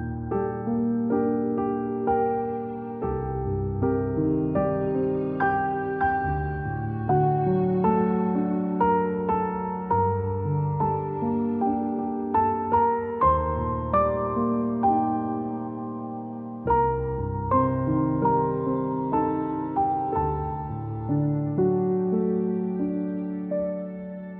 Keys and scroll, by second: 0.9-2.8 space, 4.9 -, 15.6 c, 18.4-19.8 typing.